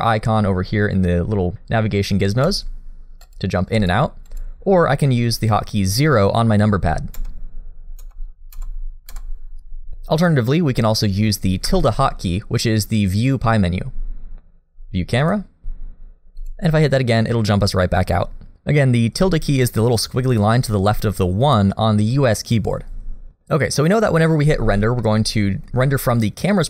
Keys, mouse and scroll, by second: 2.5 click, 3.2 click, 3.8 click, 4.3 click, 7.2 KP_0, 8.0 KP_0, 8.7 KP_0, 9.1 KP_0, 15.6 Escape, 25.0 middle click.